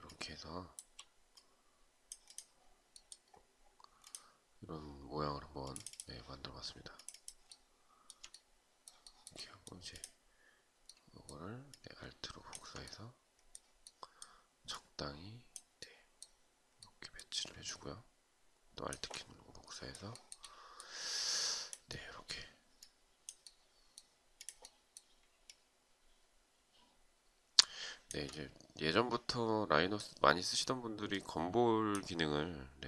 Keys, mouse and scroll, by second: 8.5 shift+right click, 10.4 alt+right click, 11.2 alt+click, 17.2 alt+click, 19.7 shift+right click, 25.0 alt+click.